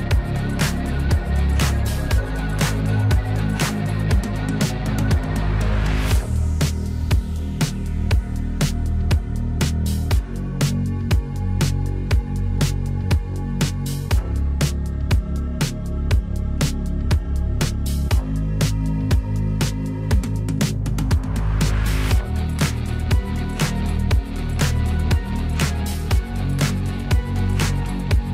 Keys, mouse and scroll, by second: 2.8 typing, 4.4 click, 4.6-4.9 typing, 6.2-7.1 typing, 10.0 click, 16.6 click, 27.2 click.